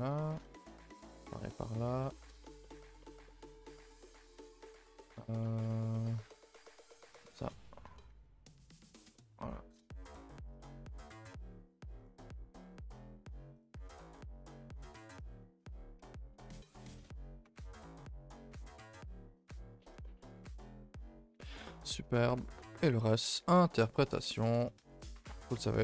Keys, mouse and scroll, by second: 0.3 scroll down 1, 0.4 shift+middle click, 1.1 click, 1.2 g, 2.0-3.8 middle drag, 3.8 scroll up 1, 4.3 click, 4.6 g, 5.1-6.2 shift+middle drag, 6.2 scroll up 1, 6.2 a, 6.4 a, 6.8 ctrl+r, 7.8 Tab, 8.8 scroll down 2, 9.0 a, 9.1 middle click, 9.7 KP_0, 10.3 scroll down 2, 10.5 shift+middle click, 10.9 scroll up 1, 10.9 Tab, 11.5 click, 11.5 g, 13.6 click, 13.7 g, 15.2 click, 16.3-18.1 drag, 18.5 a, 18.6 a, 19.5-20.0 scroll down 2, 20.0 shift+middle drag, 20.2 scroll down 2, 20.4 Tab, 20.6 a, 20.8 a, 21.4-21.8 scroll down 2, 21.8 shift+middle click, 21.9-22.3 scroll up 2, 22.3 shift+middle click, 22.9-23.3 scroll up 4, 23.3 shift+middle drag, 23.5-24.5 scroll up 4, 24.5 click, 24.8 Tab, 25.1-25.8 shift+middle drag.